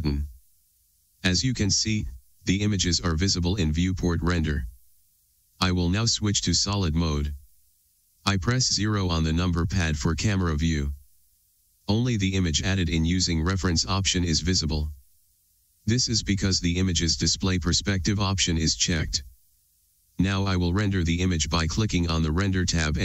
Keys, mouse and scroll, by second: 7.1 click, 9.3 KP_0, 17.1 click, 17.8 click, 19.2 click.